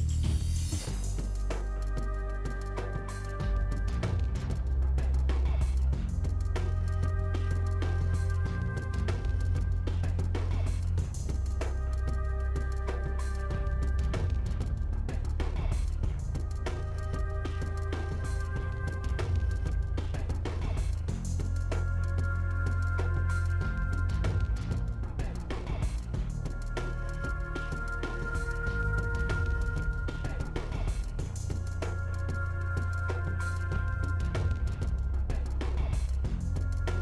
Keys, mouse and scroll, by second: 1.0-1.5 scroll down 5, 1.1 middle click, 2.7-3.7 drag, 3.7 2, 4.0 alt+click, 5.0 middle click, 5.5 ctrl+shift+click, 6.3 middle click, 6.5 KP_1, 9.9 g, 11.8 KP_7, 12.3 click, 12.9 g, 14.2 click, 14.5 g, 15.0 middle click, 15.4 shift+click, 15.9 g, 16.3 middle click, 20.1 middle click, 20.9 shift+click, 21.6 KP_1, 22.0 g, 22.5-24.0 middle drag, 24.0 click, 24.1 middle click, 27.0 l, 27.2 click, 27.7 l, 27.9 middle click, 28.8 shift+d, 29.6 r, 31.2 s, 32.4 g, 33.4 s, 34.6 middle click, 35.3 KP_1, 36.0 click, 36.2-36.6 scroll up 5, 36.6 g.